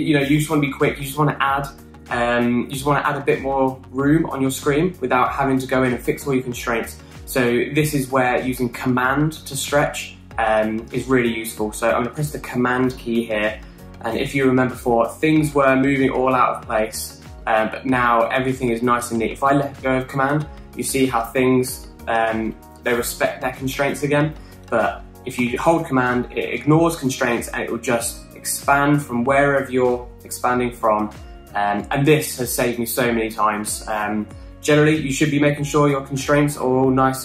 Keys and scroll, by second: 25.3 super+z, 25.9 super+z, 35.2 super+z, 35.4 super+z.